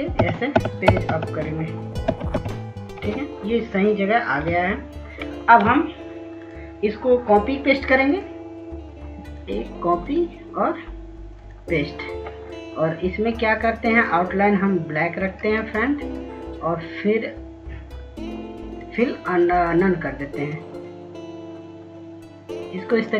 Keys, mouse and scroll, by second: 2.8 Page_Down, 3.2-4.2 typing, 5.1 Page_Up, 5.4 Page_Up, 7.2 click, 7.6-9.4 scroll down 1, 9.4 click, 18.5 right click, 21.9 click.